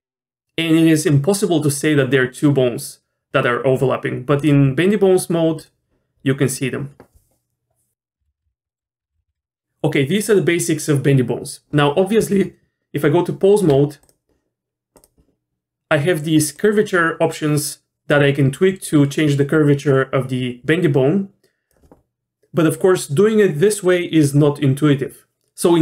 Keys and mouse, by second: 4.5-5.7 drag, 8.3 ctrl+z, 8.7 middle click, 9.0 Tab, 9.3 ctrl+z, 12.2 Tab, 14.0 click, 16.5-21.7 drag.